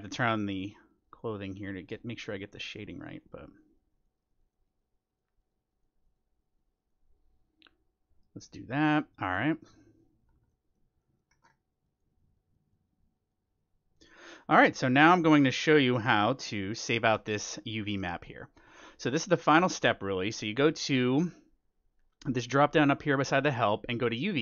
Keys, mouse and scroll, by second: 10.2-12.8 middle drag, 11.8-17.5 drag, 14.2-16.0 middle drag, 16.5-20.1 middle drag, 17.0 ctrl+s, 21.1-23.0 drag.